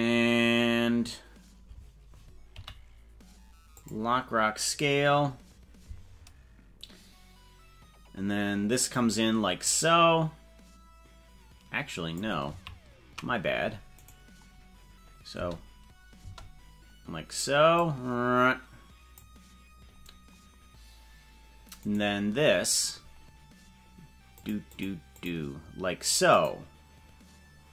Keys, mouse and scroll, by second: 2.5 i, 4.5 scroll down 2, 5.1 scroll up 3, 5.7 scroll down 1, 8.9-12.3 drag, 12.7 ctrl+z, 14.1 right click, 15.5 space, 16.3 space, 17.9-19.3 drag, 21.9 right click, 24.3 click, 24.8 click, 25.2 click, 26.4 click.